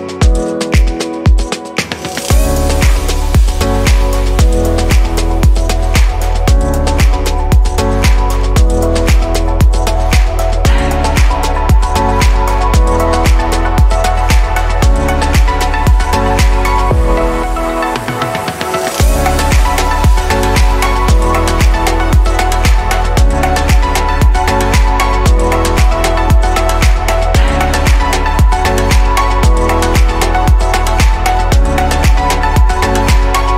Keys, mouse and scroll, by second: 1.4-2.9 shift+middle drag, 2.9 click, 4.1-5.9 scroll up 3, 5.9-11.3 shift+middle drag, 11.3 s, 16.7 click, 17.3-18.9 middle drag, 18.9-19.8 scroll down 5, 19.8-22.0 middle drag, 22.0 ctrl+z, 22.4 ctrl+z, 23.0-24.1 scroll up 4, 24.2 click, 24.7-25.5 scroll up 2, 25.6 shift+d, 27.0 click, 28.9-30.2 right drag, 30.2 r.